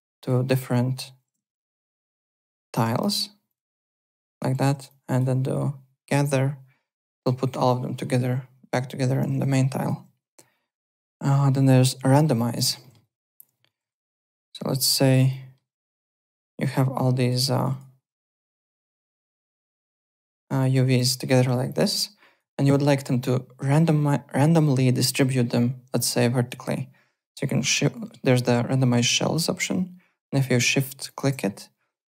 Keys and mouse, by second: 0.2 click, 1.4 ctrl+z, 1.9 click, 3.5 click, 4.3 click, 7.1 click, 9.4 alt+Tab, 9.8 alt+click, 12.4 click, 12.8 alt+middle click, 13.0 alt+right click, 14.1 click, 14.8 click, 15.3 alt+middle click, 16.1 click, 17.5 click, 19.0 alt+middle click, 19.5 click, 20.7 click, 21.2 alt+middle click, 21.6 click, 22.5 alt+middle click, 31.0 shift+click.